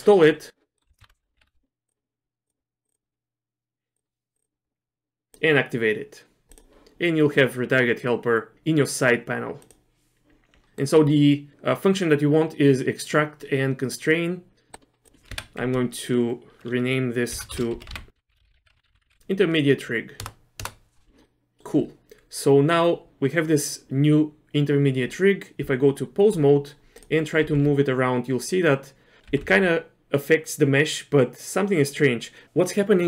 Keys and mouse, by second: 0.8 middle click, 1.1 ctrl+alt+u, 10.7 middle click, 14.7-21.1 drag, 18.8 BackSpace, 19.0 BackSpace, 20.9 BackSpace, 21.2 middle click, 25.6 Tab, 27.4 r, 29.3 r.